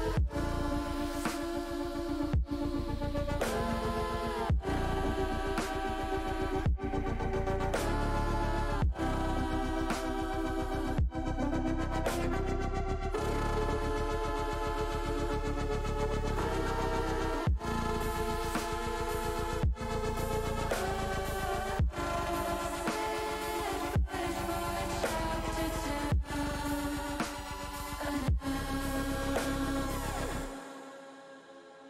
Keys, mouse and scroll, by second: 2.5 alt+h, 3.6 shift+middle click, 5.2 click, 7.6 ctrl+KP_Add, 7.8 ctrl+KP_Add, 8.2 ctrl+KP_Add, 8.3 ctrl+KP_Add, 9.9 middle click, 10.8 middle click, 12.1 ctrl+KP_Add, 13.0 ctrl+KP_Add, 14.1 ctrl+KP_Add, 14.9 ctrl+KP_Add, 16.6 middle click, 17.3 middle click, 18.3 middle click, 20.3 middle click, 21.9 click, 24.4 middle click, 25.8 middle click, 26.4 middle click, 28.3 ctrl+KP_Add, 29.5 ctrl+KP_Subtract, 30.3 click, 30.7 middle click, 31.4 middle click.